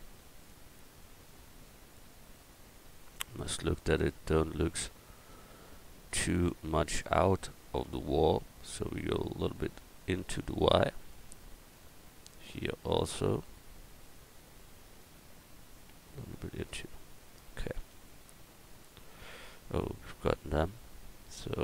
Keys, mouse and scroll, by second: 0.0 alt+d, 0.4-2.3 drag, 17.8 a, 20.6-21.6 right drag.